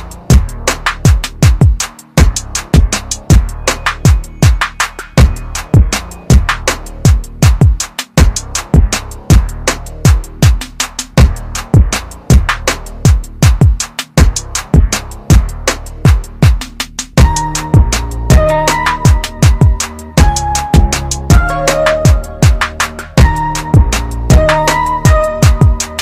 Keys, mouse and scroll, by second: 2.0 click, 7.4 click, 12.9 ctrl+KP_Subtract, 13.3 ctrl+KP_Subtract, 19.4 click, 22.8 click.